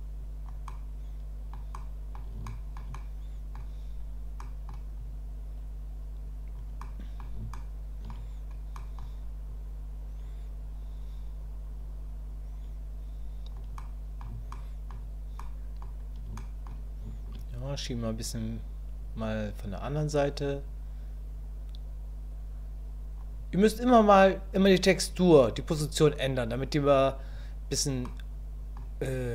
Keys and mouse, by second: 0.7 middle click, 1.7 middle click, 2.5 shift+middle click, 3.0 middle click, 4.4 middle click, 5.0-6.5 drag, 6.9 click, 7.5 shift+middle click, 8.7 click, 9.5-13.5 drag, 13.8 middle click, 14.5 shift+middle click, 15.4 middle click, 16.4 shift+click, 17.6-19.1 drag, 19.9-23.2 drag, 23.6-27.3 drag, 28.0 click.